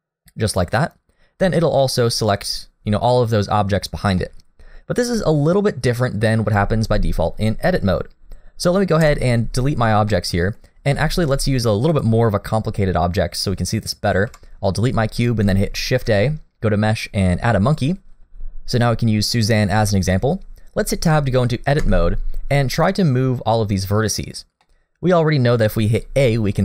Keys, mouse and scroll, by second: 1.5 scroll down 2, 1.8 middle click, 4.2 middle click, 5.1 click, 5.9 click, 9.0 Delete, 10.1 middle click, 11.1 shift+middle click, 11.4-11.9 scroll up 2, 11.9 click, 14.3 Delete, 15.9 shift+a, 21.8 Tab, 24.6 middle click, 25.9-26.5 scroll up 2, 26.2 shift+middle click.